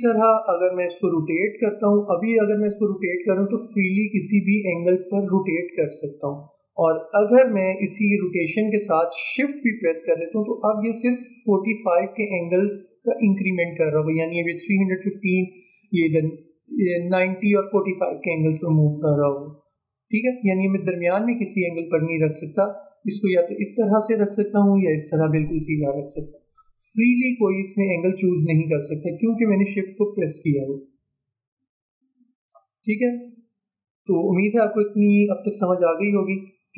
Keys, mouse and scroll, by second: 1.3 alt+scroll up 1, 2.5-12.5 drag, 34.3 ctrl+z, 36.0 v.